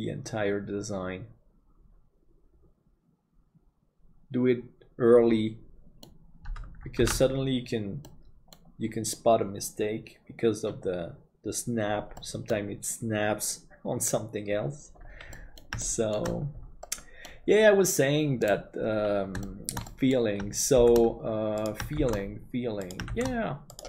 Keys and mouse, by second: 7.3 ctrl+s, 8.1 middle click, 12.2 middle click, 15.4 middle click, 15.9 shift+middle click, 16.9 middle click, 19.4 shift+middle click, 19.9 middle click, 20.8 shift+d.